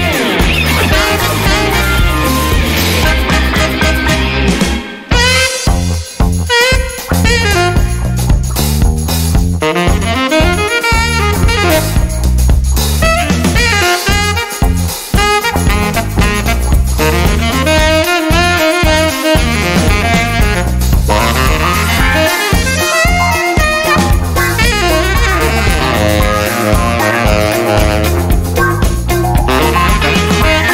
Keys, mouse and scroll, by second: 1.3 click, 2.4 click, 2.8 click, 4.0 click, 4.7 click, 8.4 click, 10.6 click, 12.1 click, 13.2 click, 14.8 click, 15.6 click, 16.9 click, 18.1 click, 20.3 click, 21.2 click, 23.0 BackSpace, 24.4 click, 26.2 0, 29.6 click.